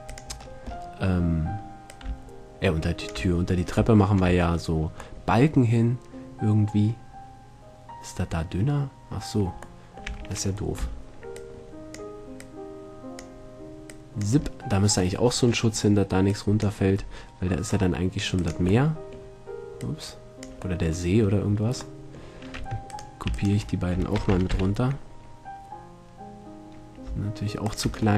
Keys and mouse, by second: 0.4-4.0 drag, 4.2-6.4 drag, 10.0-11.4 middle drag, 10.3 a, 11.0 b, 12.6-14.2 drag, 14.6-16.8 middle drag, 16.8-19.8 drag, 19.8 middle click, 22.8 Tab, 23.1-25.5 right drag, 24.4 shift+d, 27.9-28.1 drag.